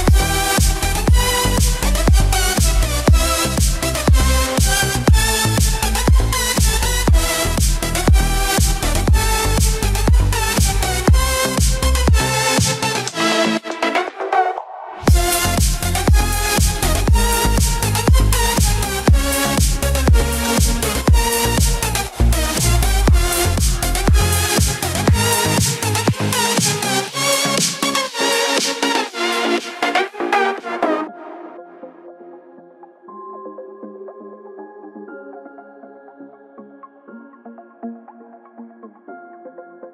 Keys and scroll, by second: 1.8 ctrl+-, 2.6 ctrl+0.